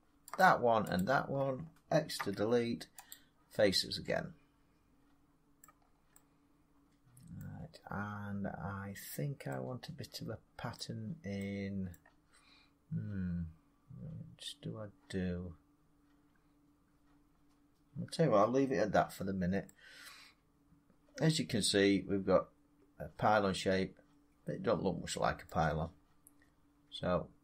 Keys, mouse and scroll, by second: 0.3 shift+click, 0.9 shift+click, 2.1 x, 3.0 click, 5.5 middle click, 5.7 middle click, 5.7 middle click, 5.8 middle click, 7.3 middle click, 7.4 scroll, 7.7-8.2 scroll up 4, 9.6 scroll, 10.7 scroll, 11.8 scroll, 16.8 middle drag, 17.2-19.7 middle drag, 18.9 Tab, 21.5 scroll down 3, 25.4-27.4 middle drag.